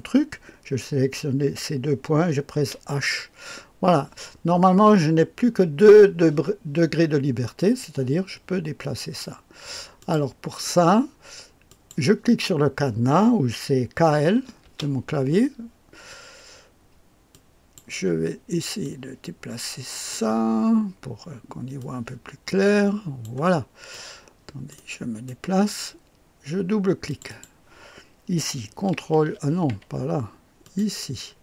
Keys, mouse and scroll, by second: 2.6 h, 7.5-9.7 drag, 10.0 click, 11.6 click, 14.2-15.1 typing, 17.3 click, 18.8-20.4 drag, 21.7-23.6 drag, 23.9 middle click, 24.7 right click, 25.7-26.1 scroll up 1, 27.0 click, 27.0 middle click, 27.3 middle click, 29.0 ctrl+v, 30.6 click.